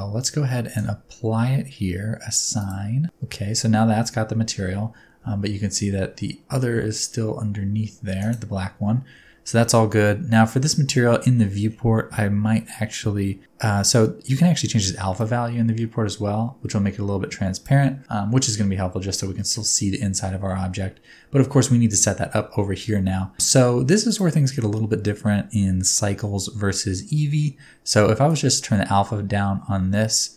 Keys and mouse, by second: 3.4 Tab, 4.7 Tab, 5.2 g, 8.2 click, 9.2 Tab, 18.0-19.1 middle drag, 19.4 shift+middle click, 19.7 middle click, 24.0 middle click, 27.1 middle click, 28.4-30.3 middle drag.